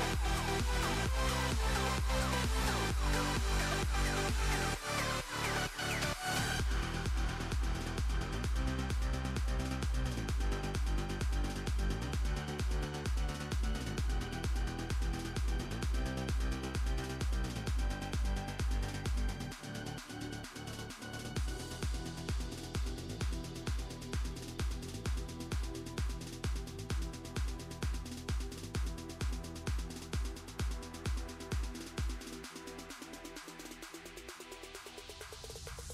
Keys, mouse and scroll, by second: 0.0 click, 0.2 s, 1.0 shift+a, 1.4 alt+g, 1.5 alt+r, 1.9 click, 2.1-3.5 drag, 3.8-5.8 drag, 6.2 ctrl+KP_0, 6.7-8.3 drag, 8.3 click, 9.0 s, 10.0 click, 10.3 click, 10.5 click, 11.6-13.5 drag, 13.7 click, 14.0 r, 15.7-16.8 drag, 16.8 space, 17.2 click, 17.5 r, 20.0 click, 20.5 Tab, 20.7-21.2 drag, 21.2 Tab, 21.8 Tab, 22.0 Tab, 22.5 click, 22.8 r, 24.0 click, 25.1-25.6 drag, 26.0 click, 27.4 click, 29.5 click, 30.7 click, 31.9-32.9 drag, 34.3 click, 34.8 click, 35.0 scroll down 1, 35.2-35.9 drag.